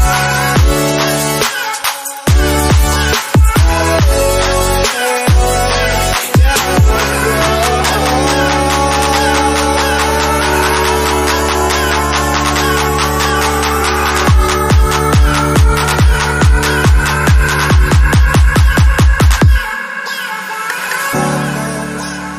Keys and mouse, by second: 0.2 click, 1.4-1.9 drag, 3.7 q, 4.1-7.6 middle drag, 7.6 q, 7.9-9.1 ctrl+middle drag, 9.1 click, 9.6 g, 13.1-13.8 ctrl+middle drag, 13.8 shift+d, 14.7 click, 16.3-17.9 drag, 18.5 g.